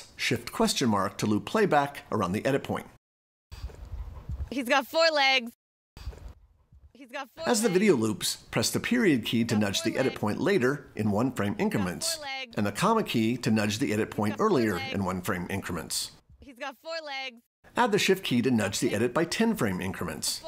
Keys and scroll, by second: 0.0 shift+/, 9.0 ., 12.6 ,, 17.6 shift+..